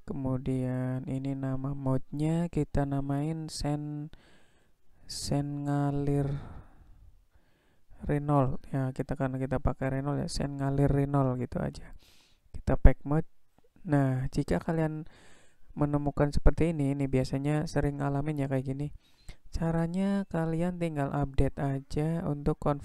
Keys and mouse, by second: 13.0-20.9 drag, 22.0-22.8 drag.